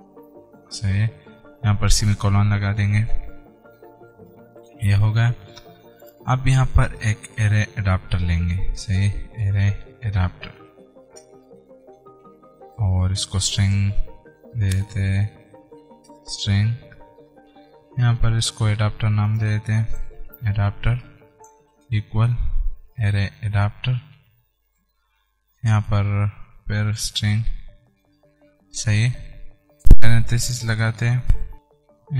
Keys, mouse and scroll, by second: 4.2 ;, 6.3 click, 7.4 Return, 9.2-10.7 typing, 11.3 Return, 13.0-14.5 typing, 16.3 Return, 17.3 Down, 17.4 alt+Tab, 19.5 click, 20.1-22.0 typing, 21.3 Return, 23.4 shift+a, 24.9 Return, 26.3-28.1 typing, 28.3 Return, 28.8 Right, 31.5-32.1 scroll down 1.